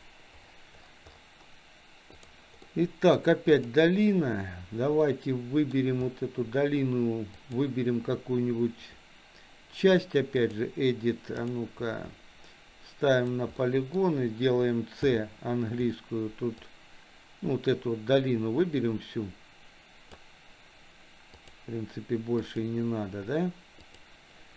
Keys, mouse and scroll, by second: 2.3-2.7 drag, 2.7-3.2 middle drag, 3.5 click, 5.2 middle click, 5.4 middle click, 7.3-10.7 drag, 11.4 click, 13.2 click, 13.6 middle click, 15.0 c.